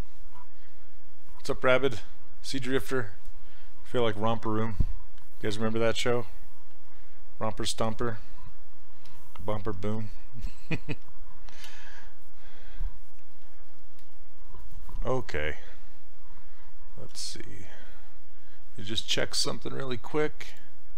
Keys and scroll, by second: 11.7 z, 15.9 alt+Tab.